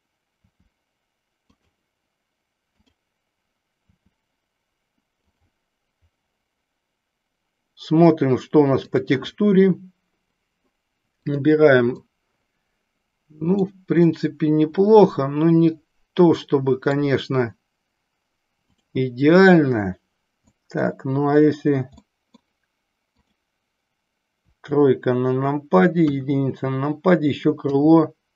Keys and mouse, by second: 0.4 r, 3.8 r, 5.4 click, 9.4 drag, 11.3 click, 12.0-13.8 middle drag, 14.2-17.0 middle drag, 20.5 middle click, 22.0-22.7 middle drag, 24.4 KP_3, 26.0 KP_1, 27.7 KP_3.